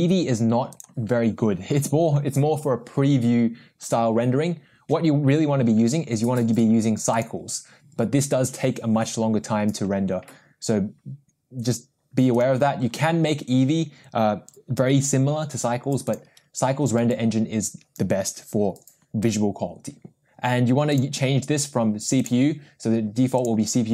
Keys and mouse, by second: 0.7-7.4 drag, 12.3-16.3 drag, 20.9-22.8 drag, 23.3-23.9 drag.